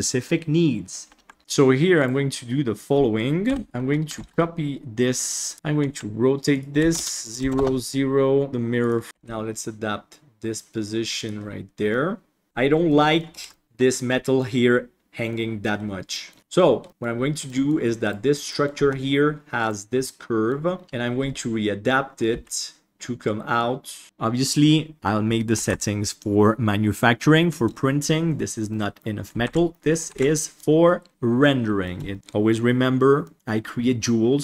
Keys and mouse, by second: 2.0 click, 2.7 click, 4.0 click, 4.8 KP_3, 6.0 g, 8.6 shift+middle click, 9.1 g, 12.0-12.4 middle drag, 12.4 alt+a, 12.8-13.1 middle drag, 13.3 ctrl+s, 13.4 middle drag, 14.1 middle drag, 15.2 middle click, 16.1 middle drag, 16.8 middle drag, 17.4 middle click, 18.0 right click, 18.4 middle click, 18.8 Tab, 19.9 middle click, 20.8 KP_1, 22.3 g, 23.5 click, 25.5 ctrl+s, 28.6 middle drag, 29.4 alt+a, 29.6 middle drag, 30.1 ctrl+s, 30.3 middle drag, 31.3-31.8 middle drag, 32.0 shift+middle drag, 33.2 middle drag.